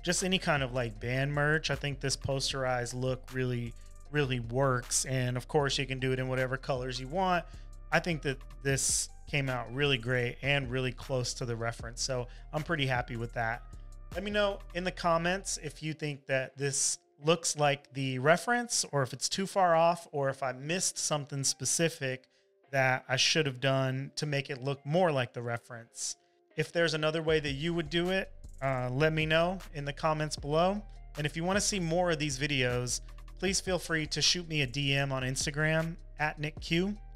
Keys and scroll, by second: 31.6 super+s.